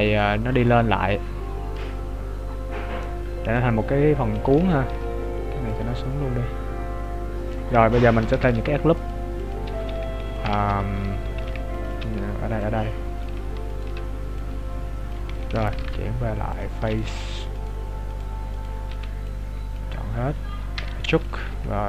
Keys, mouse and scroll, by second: 1.0 right click, 1.5 right click, 2.0 click, 5.0 alt+right click, 5.6 click, 8.6 ctrl+r, 9.8 s, 10.7 ctrl+z, 11.3 ctrl+r, 12.7 click, 13.8 alt+right click, 14.4 click, 15.9 ctrl+Tab, 16.9 right click, 17.8 right click, 18.9 b, 20.8 e, 21.5 s.